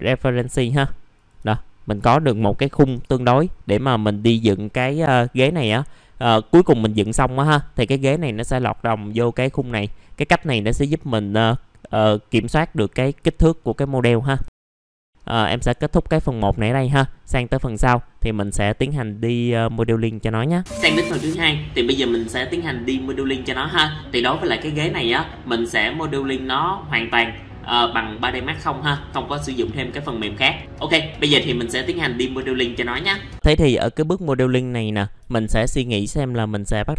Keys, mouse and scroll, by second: 0.8-1.1 scroll up 1, 1.1 click, 1.5 alt+middle click, 4.0 scroll up 1, 8.3-8.9 scroll down 1, 9.0 alt+middle click, 10.0 middle click, 14.2 scroll down 1, 14.4 alt+middle click, 15.2 scroll down 1, 16.2 alt+middle click, 16.6-17.1 scroll up 1, 17.3 middle click, 17.9 alt+middle click, 33.3 middle click, 33.4 scroll down 1, 34.2 middle click, 34.6-35.2 scroll down 1.